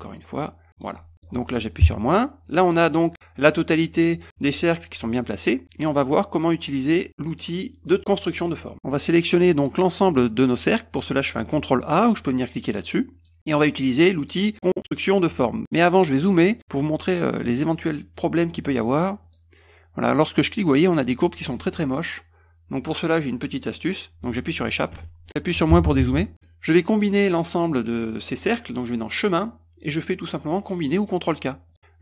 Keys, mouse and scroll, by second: 1.1 middle click, 2.7 middle click, 5.5 middle click, 8.7 scroll up 1, 13.2 click, 16.1 middle click, 16.1-16.5 scroll up 3, 16.3 middle click, 16.4 middle click, 19.3 click, 25.0 Escape, 26.5 middle drag, 29.4 click.